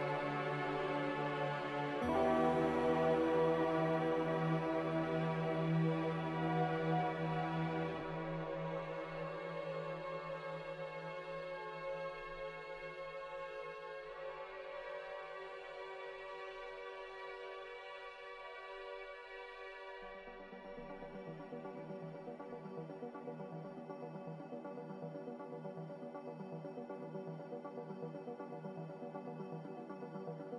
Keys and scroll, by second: 22.3 s, 23.7-25.3 typing, 28.6-29.3 typing.